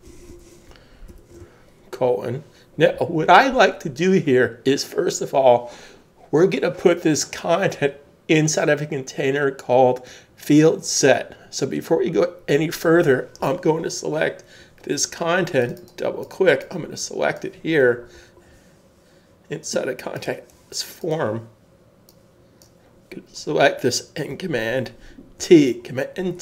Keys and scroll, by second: 0.0-1.6 typing, 2.9 typing, 25.4 super+t.